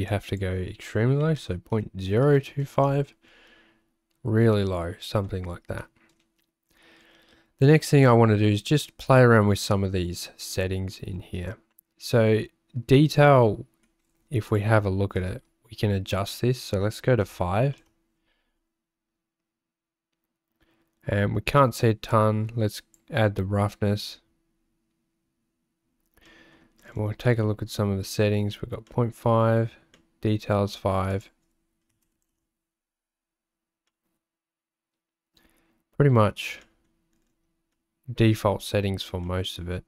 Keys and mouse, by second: 5.9 middle click, 16.1-18.0 drag, 22.1 click, 26.4 middle click, 27.3 middle click, 29.0 middle click, 30.1 middle click, 31.1-32.6 drag, 33.8-35.7 middle drag, 36.0 middle click, 36.7 middle click, 37.9 middle click, 39.2 middle click.